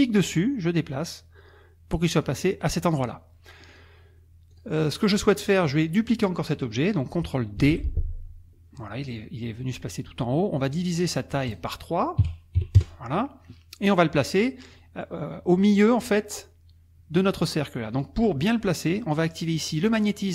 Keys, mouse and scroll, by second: 0.0-2.4 drag, 3.7 click, 4.5 click, 7.6 ctrl+d, 11.5 click, 12.6 KP_3, 12.7 KP_Enter, 14.7 click, 17.1 click, 17.9 click.